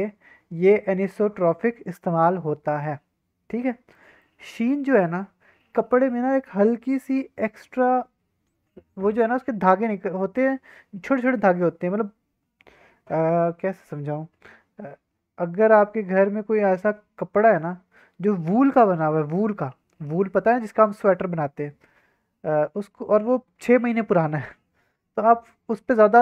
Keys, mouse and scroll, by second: 3.9 middle click.